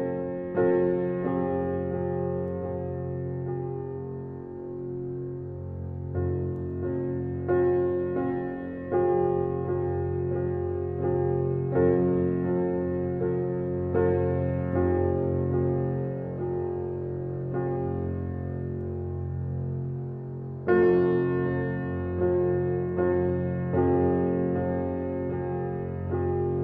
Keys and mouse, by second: 0.0 click, 1.0 click, 1.3 click, 3.6-4.0 alt+shift+drag, 5.0 click, 7.1-8.7 ctrl+alt+drag, 11.8-14.0 alt+drag, 14.8 click, 17.0 ctrl+alt+click, 18.6-21.2 alt+drag, 21.3 click, 22.7-23.8 ctrl+alt+drag, 24.1-25.8 drag.